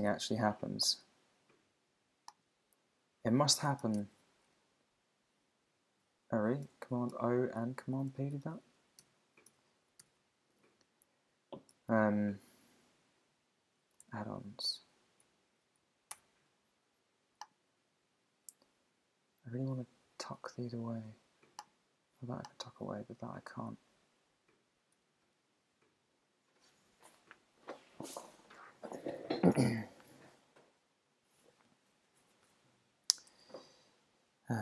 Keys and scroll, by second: 4.0 super+o, 6.6 Escape, 7.1 super+o, 7.6 super+p, 8.1 Escape, 8.4 super+p, 9.0 super+o, 9.5 Escape, 10.0 super+o, 15.6 Down, 16.1 Return, 24.9 super+=.